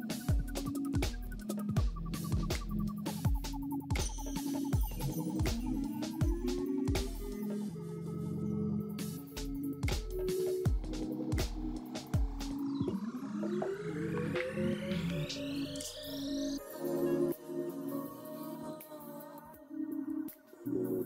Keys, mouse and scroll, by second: 0.7-1.0 scroll up 3, 1.0 right click, 2.3 right click, 3.6-4.4 typing, 4.8 right click, 6.2 right click, 6.3 5, 6.5 Return, 7.1-9.4 scroll down 3, 9.4-12.5 scroll down 1, 12.5-12.9 scroll up 2, 12.9-13.8 scroll down 2, 13.8-14.1 scroll down 1, 16.8-17.5 scroll up 1, 17.5-18.3 scroll down 3, 18.8-19.5 scroll up 2, 19.5-21.0 scroll down 4.